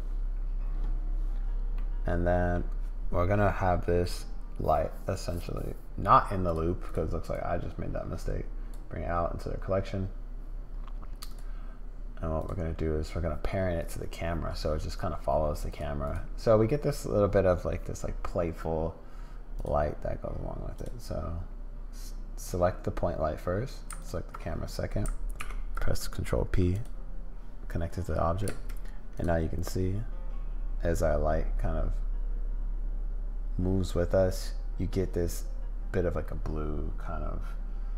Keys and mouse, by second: 1.7 middle click, 5.3 click, 7.3-8.7 drag, 11.3 click, 12.4 click, 13.8 click, 15.7 click, 16.0 click, 20.7 click, 24.0 ctrl+click, 25.3 ctrl+p, 28.5 space, 29.2 click.